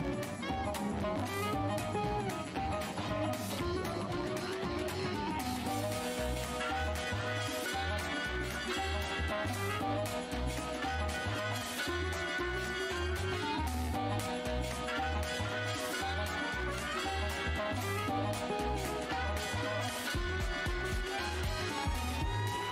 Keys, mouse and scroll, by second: 0.6-1.3 typing, 2.0 alt+click, 3.4 shift+w, 4.7 alt+click, 6.4 alt+h, 7.0 f, 8.1 click, 8.3 scroll, 8.7 ctrl+shift+h, 9.9 shift+v, 11.8 click, 13.7 v, 13.7 alt+click, 14.7 w, 15.0 shift+v, 17.2 z, 18.7-19.7 scroll down 2, 21.2 shift+d.